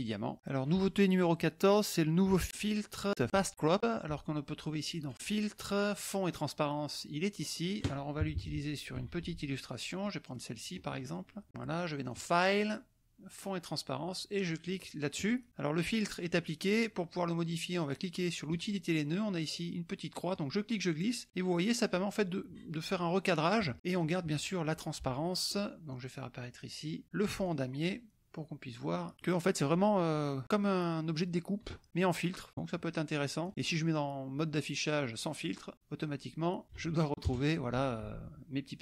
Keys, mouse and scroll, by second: 5.0 click, 7.6 click, 8.2 KP_Subtract, 8.9 middle click, 9.7 click, 10.0 click, 10.8 middle click, 12.0 click, 15.1 click, 18.5 click, 20.3 click, 22.1-23.7 drag, 23.9 click, 25.4 click, 27.4 click, 29.0 click, 29.3 middle click, 30.1 middle click, 32.6 click, 33.6 click, 36.6 KP_Subtract, 36.8 KP_Add.